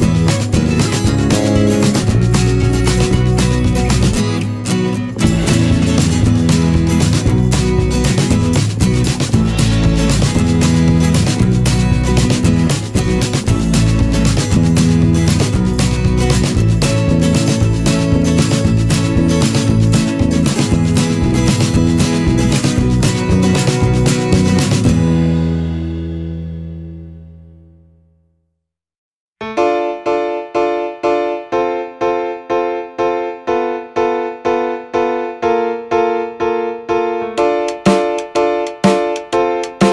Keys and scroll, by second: 12.3 ctrl+=, 17.4 ctrl+=, 26.6 ctrl+-.